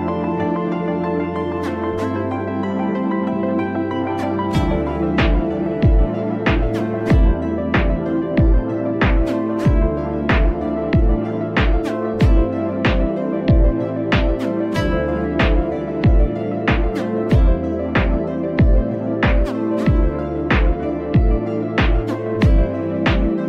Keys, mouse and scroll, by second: 0.5-1.1 scroll up 1, 1.1-1.9 scroll down 1, 1.9-2.9 scroll down 1, 2.9-6.1 middle drag, 7.3-8.1 middle drag, 8.1 scroll up 1, 8.2-8.7 middle drag, 8.7-9.0 scroll down 3, 9.0-10.3 middle drag, 10.3 click, 11.8 g, 14.1 drag, 14.4-14.7 scroll up 4, 14.7-18.2 middle drag, 18.2 click, 18.6-20.6 shift+middle drag, 20.6 alt+click, 22.4-23.4 drag.